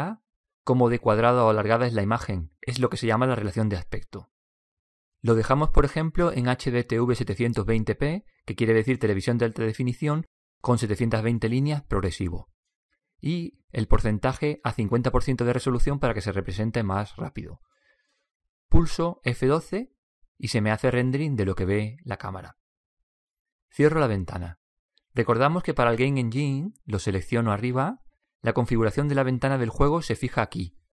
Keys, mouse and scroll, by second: 0.9 click, 1.7 drag, 4.8-5.9 drag, 17.2 BackSpace, 20.1 F12, 23.7 typing.